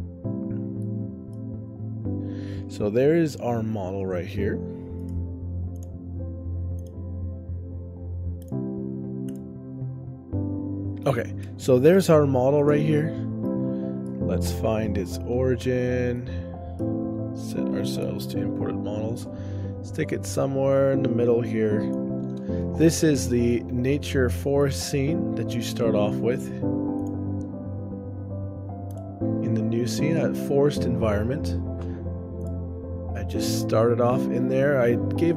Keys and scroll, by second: 2.7 ctrl+alt+o, 9.7 ctrl+alt+o, 11.0 shift+space, 11.7 ctrl+alt+o, 13.5 shift+space, 14.9 ctrl+alt+o, 16.2 shift+space, 17.4 ctrl+alt+o, 22.6 shift+space, 26.2 ctrl+alt+o, 34.0 ctrl+alt+o.